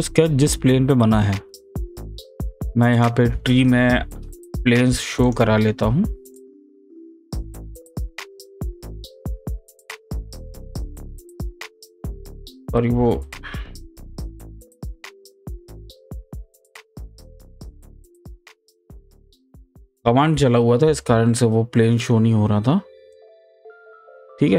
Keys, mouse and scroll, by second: 2.9 click, 8.0 ctrl+click, 10.5 right click, 11.6 click, 13.1 click, 14.4 click, 16.1 right click, 17.4 click, 18.1 right click, 19.2 click, 23.1 click.